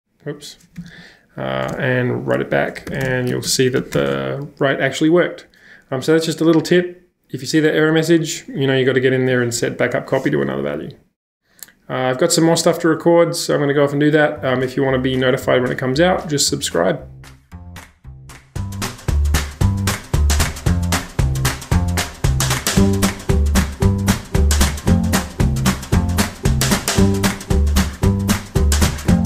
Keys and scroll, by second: 0.0-5.3 typing, 17.9 shift+super+2, 21.8 shift+super+2, 25.8 shift+super+2.